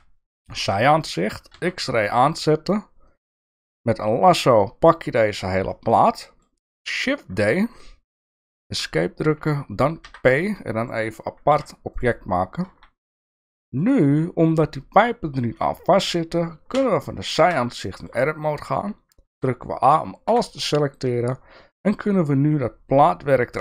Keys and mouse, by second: 0.8 shift+middle click, 1.5 alt+z, 3.2-5.2 drag, 5.7 middle click, 7.2 shift+d, 10.1 p, 11.5 Tab, 12.7 alt+z, 13.2 click, 13.5 shift+middle click, 16.7 KP_3, 17.4 Tab, 17.8 shift+middle click, 19.3 a, 20.3 e.